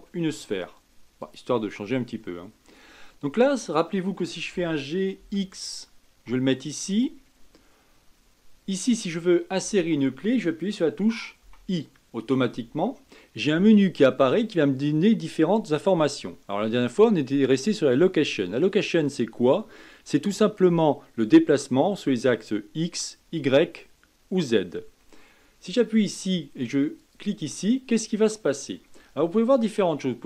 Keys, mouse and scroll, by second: 4.5 g, 11.4 i.